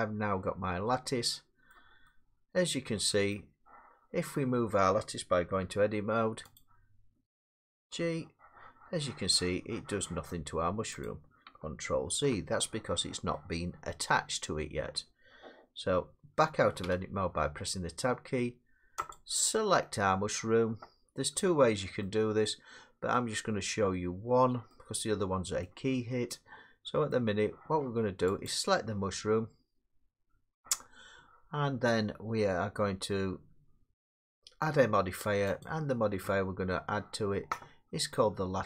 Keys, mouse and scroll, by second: 1.7 middle click, 3.3 middle click, 5.6 Tab, 6.6 click, 7.7 g, 11.1 click, 12.1 ctrl+z, 14.4 middle click, 16.8 Tab, 19.1 click, 23.1 middle click, 25.6 middle click, 27.1 middle click, 28.5 click, 35.9 click.